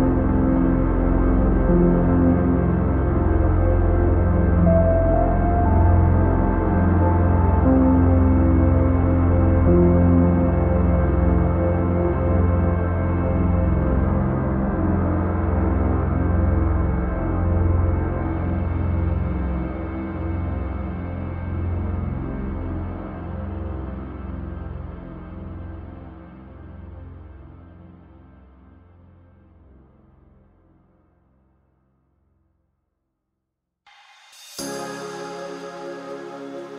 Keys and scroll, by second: 21.9 ctrl+-, 23.3 ctrl+=.